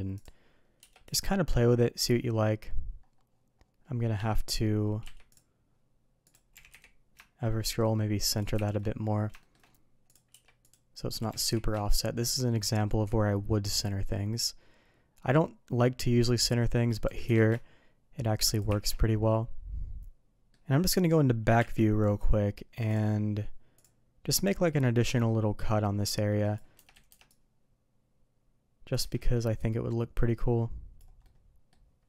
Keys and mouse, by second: 0.1 click, 0.7 q, 5.0 q, 6.5 g, 8.5 shift+2, 9.3 shift+middle drag, 10.3 q, 11.3 g, 17.0 g, 18.7 shift+2, 20.3 middle click, 23.7 click, 25.1-27.0 drag, 26.9 Escape, 27.0 Escape, 27.2-29.1 drag, 29.6 Escape, 29.6-32.0 drag, 31.2-32.0 middle drag.